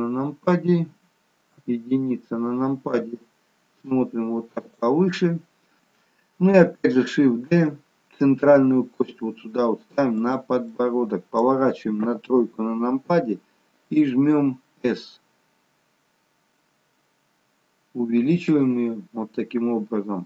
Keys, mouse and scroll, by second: 1.7 KP_1, 3.8 g, 7.6 shift+d, 12.2 middle click, 12.2 KP_3, 13.9 s.